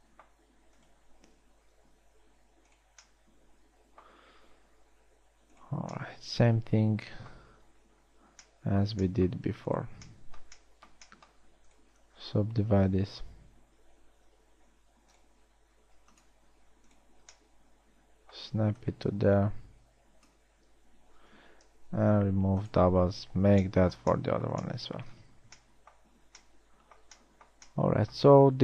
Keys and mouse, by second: 1.5 click, 2.4 g, 5.1 g, 6.9 middle click, 9.2 middle click, 13.0 w, 15.1 g, 16.1 w, 21.4 a, 21.4 a, 22.6 ctrl+v, 26.9 a.